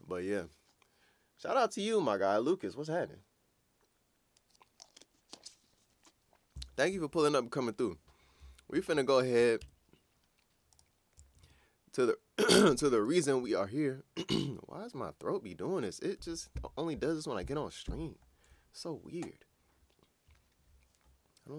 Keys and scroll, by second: 9.6 super+Tab, 11.4 super+Tab.